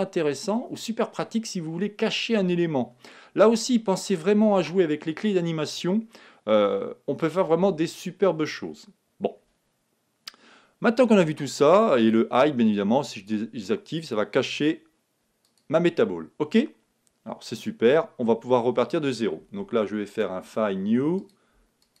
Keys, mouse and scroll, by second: 13.2-17.2 drag, 20.0-22.0 drag.